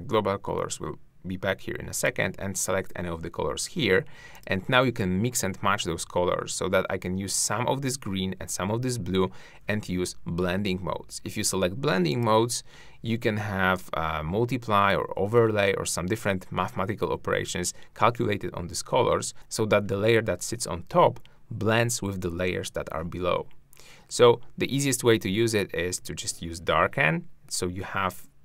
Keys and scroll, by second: 19.3 shift+`.